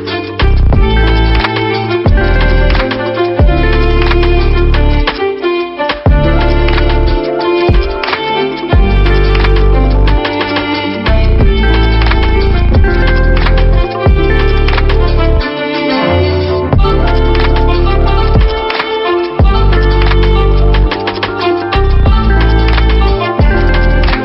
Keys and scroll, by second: 1.5 ctrl+-, 3.1 v, 17.2 Down, 17.3 Down, 19.0-19.9 typing, 19.9 Down, 21.8 ctrl+=, 22.5 space.